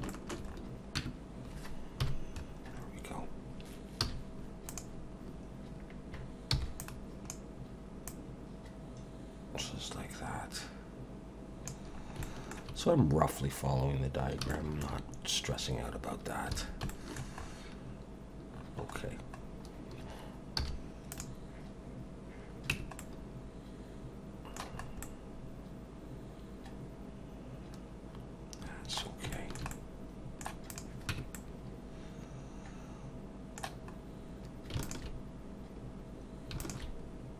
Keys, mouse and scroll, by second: 0.1 shift+middle click, 0.5 scroll up 4, 1.0 Tab, 2.0 KP_1, 2.7 scroll up 2, 4.0 z, 6.5 b, 8.1 click, 11.9 scroll down 2, 12.2 shift+middle click, 15.9-16.5 scroll down 2, 16.6 alt+a, 16.9 shift+middle click, 17.4-18.6 scroll up 6, 18.6-19.6 scroll down 8, 20.6 z, 22.7 Tab, 23.0 middle click, 24.8 scroll up 3, 25.0 middle click, 29.3 shift+middle click, 30.7 click, 31.1 Tab, 31.4 middle click, 33.9 scroll up 2, 34.8 alt+shift+click, 37.2-37.3 scroll down 2.